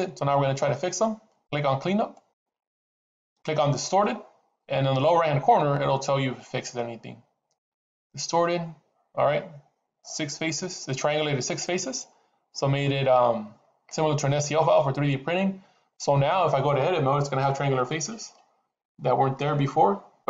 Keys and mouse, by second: 2.1 click, 7.5 click, 17.8 Tab, 19.3-20.2 middle drag.